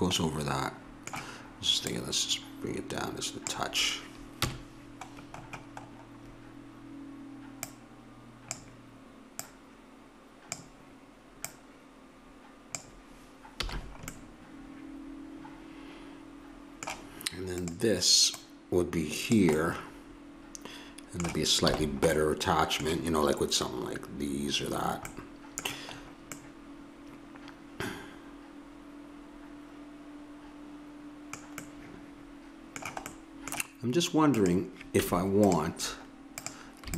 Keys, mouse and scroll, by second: 1.8-3.8 drag, 4.4 KP_1, 7.6-13.6 drag, 13.6 a, 17.6-19.6 drag, 19.6 middle click, 19.9 click, 21.7 a, 28.2 middle click, 31.6-34.3 middle drag, 34.3 click, 35.0 Tab, 35.9-36.9 drag.